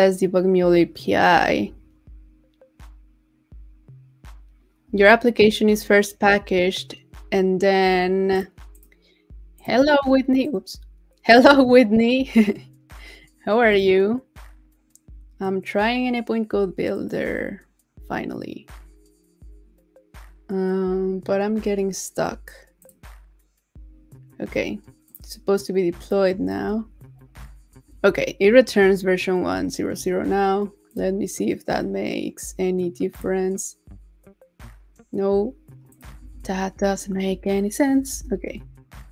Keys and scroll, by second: 26.5 super+r, 36.3 super+a, 36.8 super+c, 38.1 super+r.